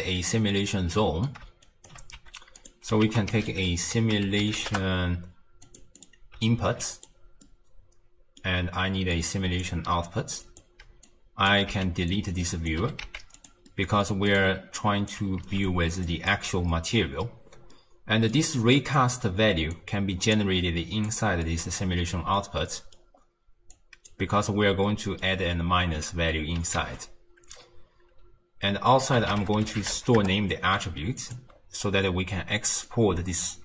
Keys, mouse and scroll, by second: 0.3-1.6 middle drag, 1.6 shift+right click, 2.2 g, 3.0 ctrl+a, 6.0 click, 6.5 alt+click, 7.4-8.6 middle drag, 8.6-9.1 scroll down 1, 9.1 click, 10.4 click, 11.0 drag, 11.7 x, 12.1 click, 12.8 g, 13.7 middle click, 14.3 click, 14.8 drag, 15.4 ctrl+x, 15.6 click, 16.9-17.7 scroll up 1, 17.7-19.7 middle drag, 19.7 drag, 21.4-23.1 middle drag, 23.1-23.7 scroll down 2, 23.7 click, 24.9-26.8 middle drag, 26.8 ctrl+a, 31.5-32.6 scroll up 4, 32.9 drag.